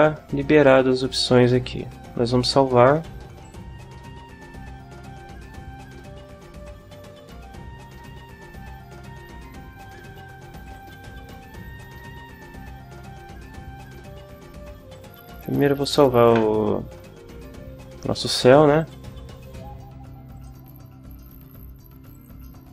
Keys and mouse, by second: 3.4 click, 6.6 click, 10.6 click, 11.7 click, 14.9 click, 16.2 ctrl+w, 18.8 click, 20.3 click, 22.1 click.